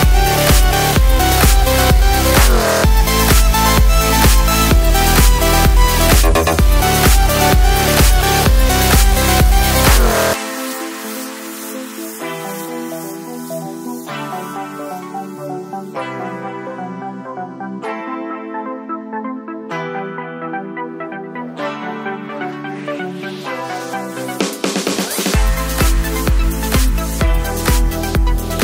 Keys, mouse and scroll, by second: 5.4 click, 9.4 Up, 13.6 Down, 14.3 click, 15.0 Right, 18.3 click, 19.2 Left, 22.7-25.4 drag, 25.4 right click, 26.6 click.